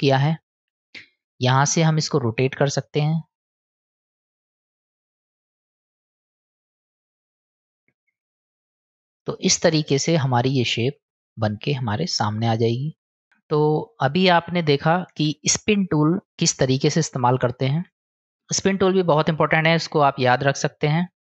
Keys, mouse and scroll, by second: 0.6-3.1 drag, 3.6-5.5 drag, 6.0-8.5 drag, 8.8 click, 9.4-11.9 middle drag, 13.1 click, 13.3 Tab, 13.5 click, 15.2 Tab.